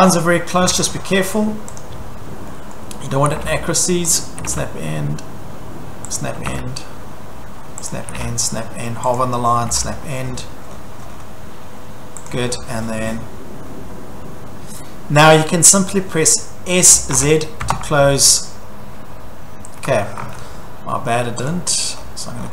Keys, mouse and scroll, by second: 0.4-1.2 typing, 1.8 click, 2.1-2.4 scroll, 2.7-3.1 scroll, 3.0-4.7 typing, 4.2 click, 6.2 click, 6.4 s, 7.9 click, 9.2 click, 10.3-11.2 scroll, 12.3 click, 12.5-14.2 scroll, 16.9-17.6 typing, 20.2 Escape, 21.5 click, 21.9-22.5 scroll.